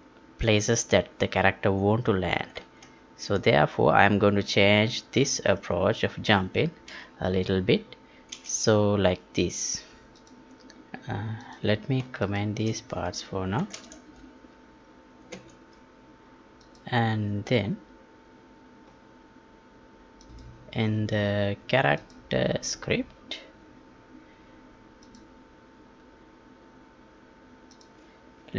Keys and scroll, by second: 2.8 alt+Tab, 13.5 ctrl+k, 15.3 ctrl+s.